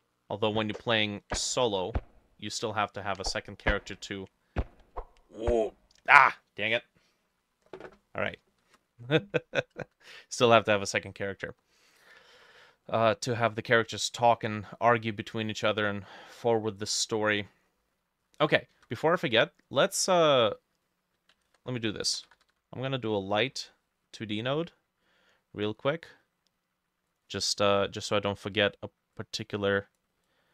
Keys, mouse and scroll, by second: 8.5 alt+space, 8.5-10.7 drag, 8.5 middle click, 8.7 alt+F4, 10.9 middle click, 11.6 middle click, 12.1 middle click, 12.9 middle click, 13.1 scroll down 1, 13.6 middle click, 14.2 middle click, 14.3-14.7 scroll down 1, 15.0 middle click, 15.8-16.4 scroll down 4, 16.4 middle click, 16.9 middle click, 17.5 middle click, 18.0 scroll up 2, 18.3 middle click, 18.8 ctrl+s, 19.2-19.7 scroll up 1, 21.5 ctrl+a, 21.8-23.1 typing, 27.3 double click.